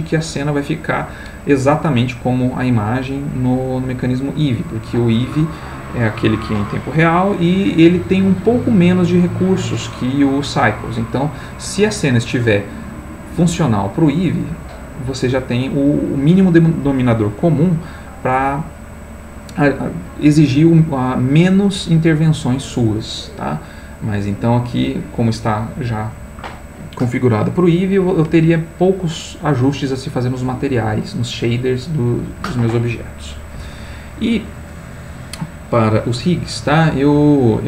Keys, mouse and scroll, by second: 37.1 click.